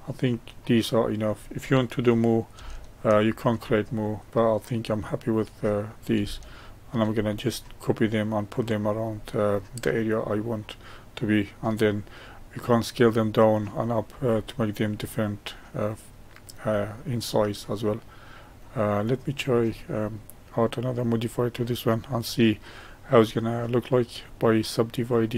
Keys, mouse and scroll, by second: 2.7-14.5 shift+middle drag, 14.9-16.7 middle drag, 16.7-17.2 scroll up 1, 17.2-18.9 middle drag, 18.9 click, 19.6-21.1 middle drag, 21.1-24.3 drag.